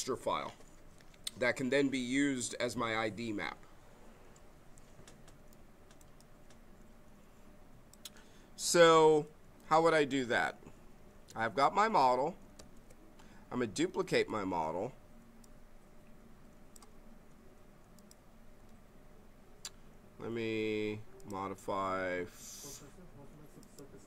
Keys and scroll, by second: 12.5 ctrl+d, 13.9 w, 18.6 z.